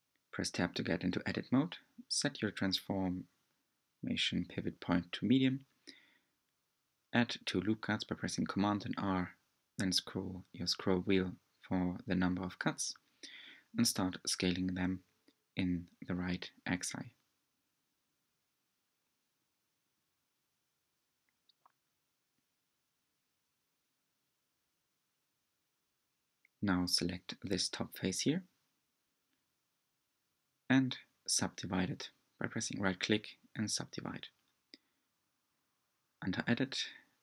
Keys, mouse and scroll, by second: 2.1 r, 9.1-11.2 middle drag, 11.4 r, 15.3 s, 23.3 3, 23.7 click, 24.3-26.1 middle drag, 27.3-34.4 right drag, 34.5-37.2 drag.